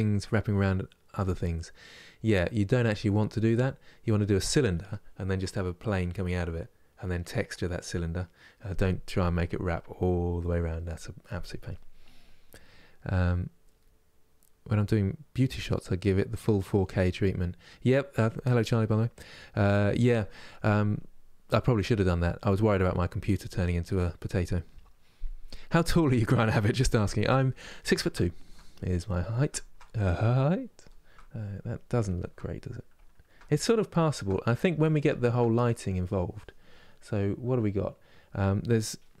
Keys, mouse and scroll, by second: 20.4-39.2 middle drag.